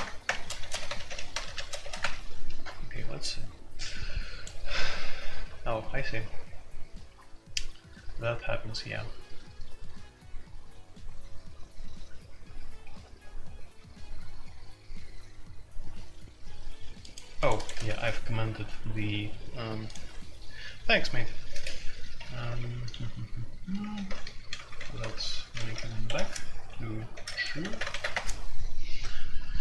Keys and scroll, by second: 0.0-2.0 typing, 17.9 shift+c, 20.0 Escape, 22.0-28.4 typing.